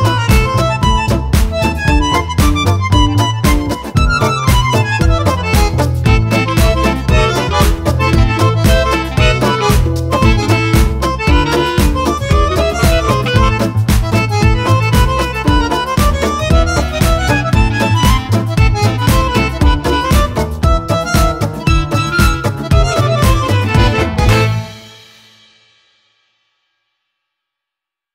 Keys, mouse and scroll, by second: 1.1-3.2 drag, 4.2 click, 5.9 click, 6.8 click, 8.8 click, 10.3 click, 11.3 click, 13.6-15.0 drag, 15.3 click, 15.8 click, 18.2 click, 19.3-20.4 drag, 20.8 shift+click, 21.9-24.1 drag, 24.4 click, 25.4 click, 26.3 click, 27.3 click.